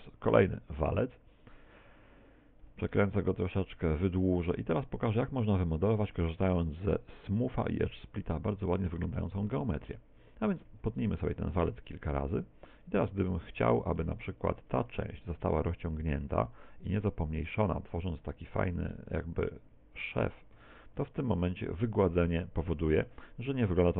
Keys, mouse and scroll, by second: 0.8 shift+a, 2.7 r, 3.9 ctrl+click, 3.9 s, 5.9 ctrl+click, 7.5 click, 8.3 middle click, 9.2 middle click, 10.3 Tab, 10.9 ctrl+r, 12.0 click, 12.4 a, 13.3 alt+shift+right click, 14.5 alt+shift+right click, 15.0 s, 16.7 click, 16.9 s, 18.8 s, 20.2 Tab, 20.2 click, 20.6 middle click.